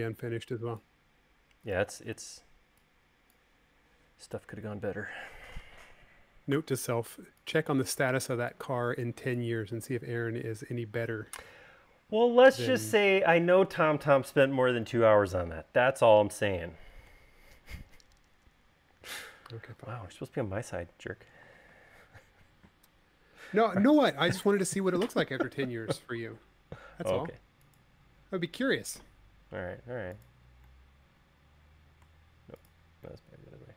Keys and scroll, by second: 3.2 space, 7.5 v.